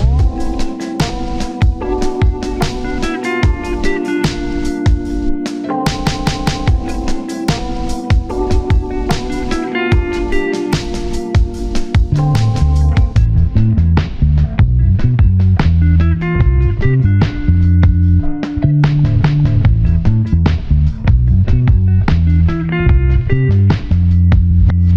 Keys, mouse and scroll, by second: 0.3 shift+middle click, 0.4-1.0 scroll up 1, 4.9-5.2 scroll up 1, 5.2 double click, 5.9 1, 6.2 scroll down 1, 6.5 1, 6.7 scroll up 1, 6.9 shift+middle click, 7.3-7.6 scroll down 1, 9.5 shift+click, 12.5 scroll down 1, 13.9 shift+click, 14.9 shift+click, 15.7 ctrl+click, 16.9 scroll down 1, 18.3 double click, 18.7 1, 18.9 scroll down 1, 19.0 scroll up 1, 19.1 1, 21.9 scroll up 1, 22.1 shift+middle click, 22.4 1, 22.5 scroll up 1, 23.2 1, 23.3 shift+middle click, 24.1 scroll up 1.